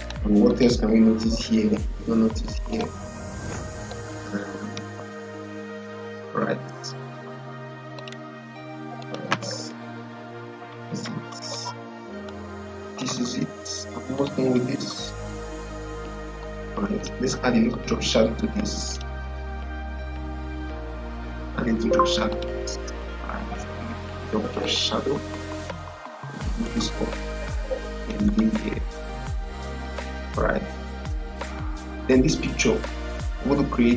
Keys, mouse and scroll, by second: 4.9 ctrl+0, 7.9 click, 12.1 click, 14.1 click, 16.9 click, 22.2 click, 24.5 click, 27.9 click, 30.1 click, 30.1-33.9 drag.